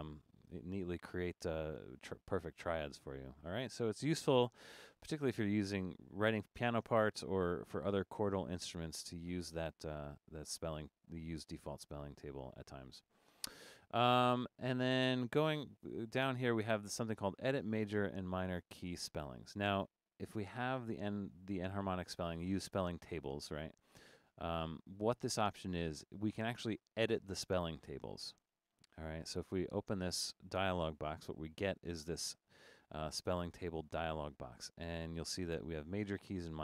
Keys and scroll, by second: 9.0 BackSpace.